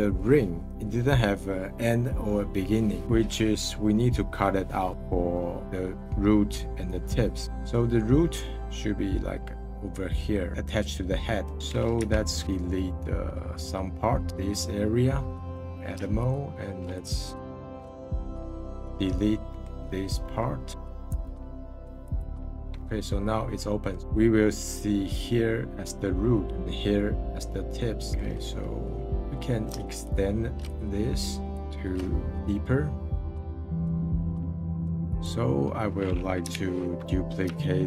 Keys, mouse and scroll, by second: 4.9-6.1 scroll up 12, 6.1-7.4 scroll down 5, 7.4 middle click, 8.0 scroll up 1, 10.5-11.6 middle drag, 11.6-11.9 scroll up 5, 11.9 /, 12.4 middle click, 12.9 scroll up 2, 14.1-15.7 middle drag, 16.2-18.6 alt+shift+drag, 18.6-21.1 middle drag, 21.1 x, 22.8-26.5 middle drag, 26.5-27.2 scroll up 5, 27.2-27.7 scroll down 3, 27.7 middle click, 29.0-30.0 scroll up 1, 30.0-32.0 alt+shift+drag, 32.0 middle click, 32.4-33.6 drag, 33.6 middle click, 33.8 s, 34.0 s, 34.7 click, 35.0-36.5 middle drag, 36.5 /.